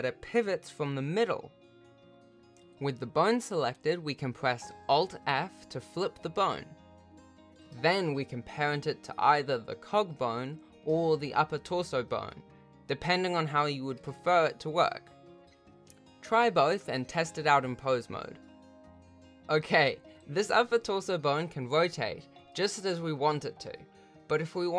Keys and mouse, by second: 1.6 r, 6.6 alt+f, 8.2 ctrl+Tab, 8.8 r, 10.7 ctrl+Tab, 12.9 ctrl+p, 14.0 ctrl+Tab, 15.1 r, 16.0 click, 16.2 r, 17.0 Tab, 17.2 ctrl+p, 18.2 alt+a, 18.4 ctrl+Tab, 19.3 r.